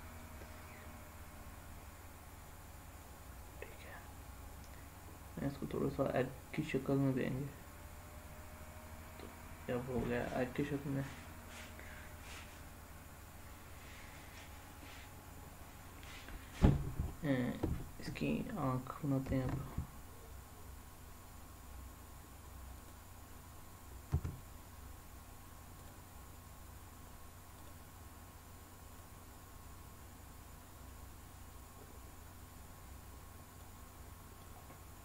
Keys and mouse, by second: 0.2-3.0 drag, 3.6 click, 4.0-9.2 middle drag, 11.5 click, 19.2 shift+a, 24.1 s, 25.8 click, 27.6 click, 28.9-33.6 drag, 34.4-35.0 middle drag.